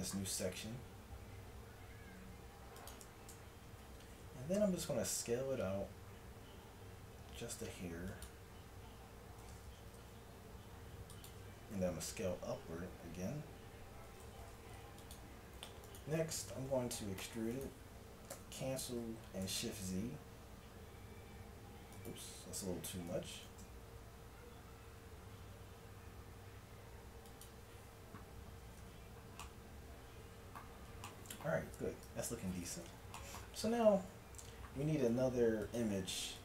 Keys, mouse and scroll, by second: 0.7 e, 3.4 KP_1, 4.7 s, 10.0 g, 11.8 e, 15.9-17.3 drag, 17.3 e, 18.3 s, 23.1 s, 28.7 a, 28.8 Tab, 32.1 KP_1.